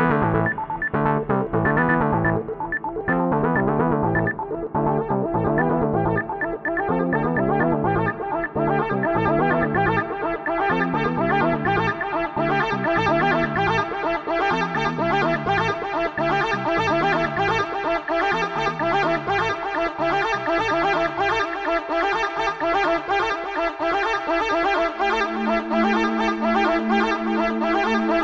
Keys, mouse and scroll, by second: 1.6 Tab, 5.7 click, 7.7-19.9 drag, 20.0 u.